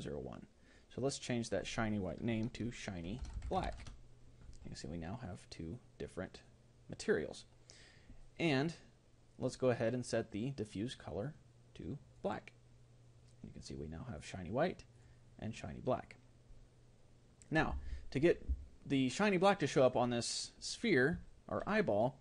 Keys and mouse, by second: 11.4-17.5 drag, 19.8-22.2 right drag, 21.3-22.2 middle drag.